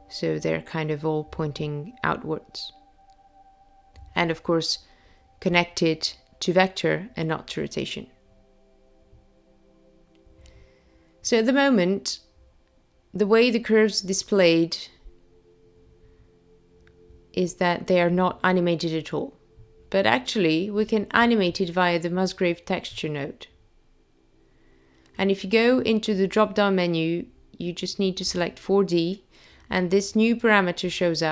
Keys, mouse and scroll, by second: 4.4 click, 13.5 click, 15.0 click, 16.5 click, 19.0 click, 27.2 click, 30.1 click.